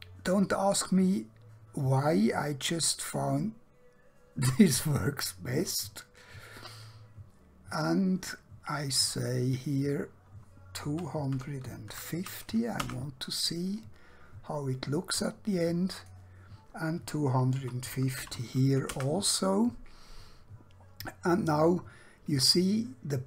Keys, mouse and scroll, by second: 6.9 scroll down 1, 7.7 scroll up 1, 9.6 click, 10.9-11.9 typing, 12.9 Return, 16.0 click, 17.5-18.1 typing, 19.0 Return.